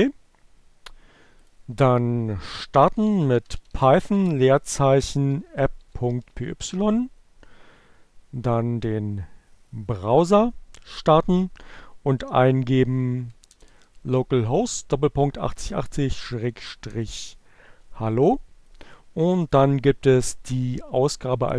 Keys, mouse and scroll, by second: 0.6-1.7 drag, 2.4-3.9 typing, 5.0-6.4 typing, 7.7 Return, 12.8 l, 14.2 Down, 15.0 BackSpace, 15.6 BackSpace, 18.3 Return, 20.3 click.